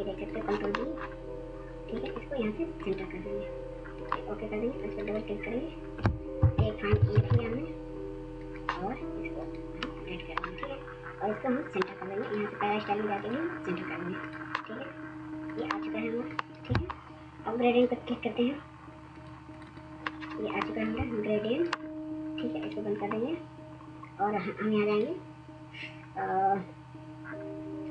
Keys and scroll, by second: 5.9 1, 6.7 ctrl+a.